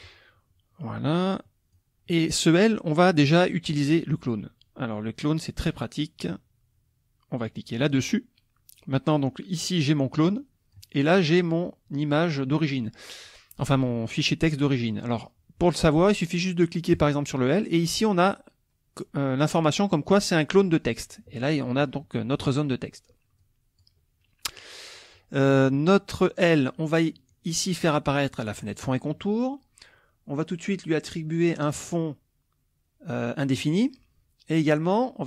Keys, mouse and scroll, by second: 1.1 click, 7.9 click, 10.2 click, 11.4 click, 16.9 click, 21.5 click, 23.4-24.0 drag, 28.6 click, 33.6 click.